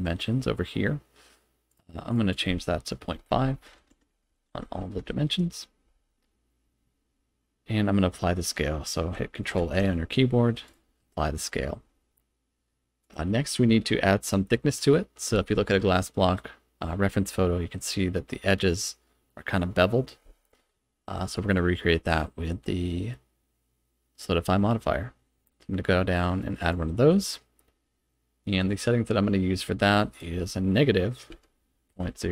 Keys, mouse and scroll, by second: 1.7 click, 2.3-6.0 drag, 7.1-9.1 scroll up 1, 9.6 ctrl+a, 13.0 click, 22.1-26.7 drag, 30.1-32.3 drag.